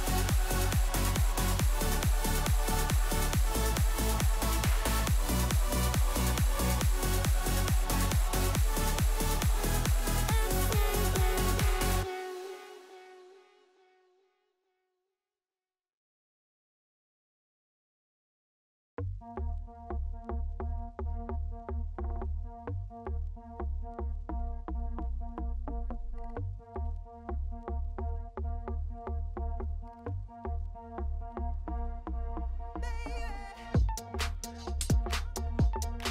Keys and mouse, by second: 0.4 g, 2.8 Tab, 3.3 KP_1, 4.2 shift+drag, 4.6 Tab, 4.9 shift+click, 5.2 z, 6.0 1, 6.3 click, 7.1 g, 8.9 click, 9.4 g, 12.0 g, 13.7 middle click, 14.3 click, 15.1 j, 15.5 click, 16.6 KP_1, 17.0 g, 18.4 z, 18.8 Tab, 19.3 shift+drag, 20.1 ctrl+3, 20.5-21.0 drag, 21.3-21.7 middle drag, 21.7 Tab, 22.1 middle click, 23.0 a, 23.3 middle click, 23.8 ctrl+b, 27.7 Tab, 28.3 KP_1, 29.4 ctrl+z, 29.7 ctrl+z, 30.1 middle click, 30.4 2, 31.6 middle click, 32.4 ctrl+click, 32.7-33.9 middle drag, 34.4 ctrl+b.